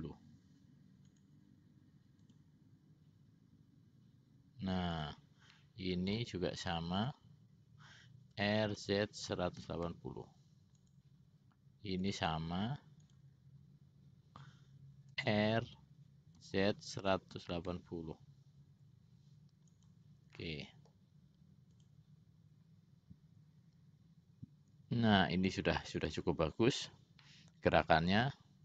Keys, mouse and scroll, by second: 2.4 click, 5.1 click, 5.7 middle click, 7.1 click, 8.5 r, 12.1 click, 13.2 click, 15.3 r, 20.5 middle click, 21.9 click, 26.2 click, 27.3 middle click, 28.4 middle click.